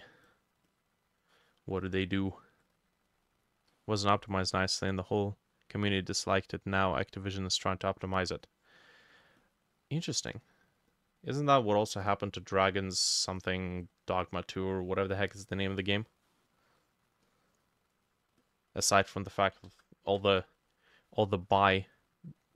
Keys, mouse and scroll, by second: 0.7 double click, 1.3-5.7 drag, 1.3 middle click, 1.8 middle click, 3.7 middle click, 8.9-10.9 drag, 13.0-15.4 drag, 15.4 middle click, 15.7 middle click, 16.3 middle click, 17.3 double click, 18.4 double click, 19.7 ctrl+z, 20.3 ctrl+z.